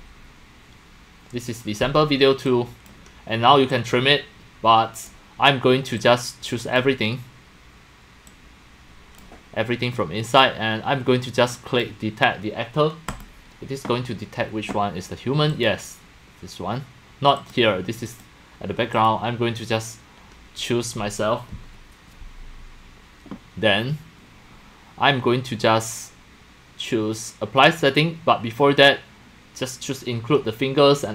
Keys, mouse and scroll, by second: 2.5-2.9 drag, 3.7-5.1 drag, 5.3 click, 6.0 click, 8.3 click, 11.5 click, 13.1 click, 15.5 click, 17.4 click, 18.1 click, 18.9 click.